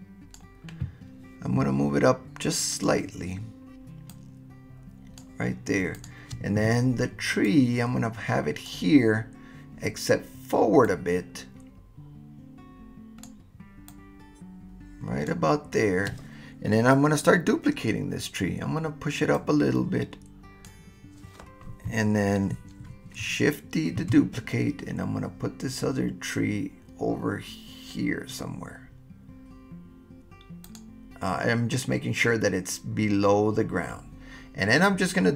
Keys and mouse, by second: 4.2-5.2 right drag, 7.4-8.7 right drag, 11.0-13.1 right drag, 13.1 click, 13.9-15.3 drag, 19.3-20.7 drag, 24.0 shift+d, 30.6 click.